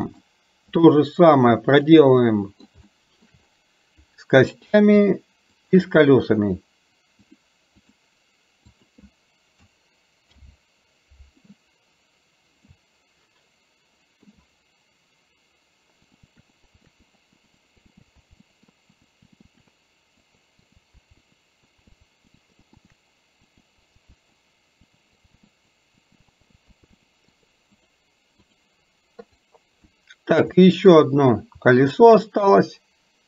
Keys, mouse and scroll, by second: 0.0-0.9 drag, 1.7 click, 2.3 middle click, 2.9 shift+middle click, 5.7 shift+click, 7.3 click, 8.7 click, 10.3 ctrl+p, 12.8-14.3 shift+middle drag, 16.1 click, 16.5 click, 17.0 middle click, 17.4 click, 17.9 middle click, 18.2 ctrl+p, 18.5 middle click, 18.9 click, 19.2 click, 19.4 middle click, 20.2 click, 20.6 click, 21.0 ctrl+p, 21.3 middle click, 22.2 click, 22.7 middle click, 23.5 click, 23.8 click, 24.3 ctrl+p, 24.8 click, 25.6 click, 26.6 ctrl+p, 27.1 middle click, 27.8 click, 29.4 click, 29.9 shift+middle click, 30.6 middle click, 31.9 shift+click.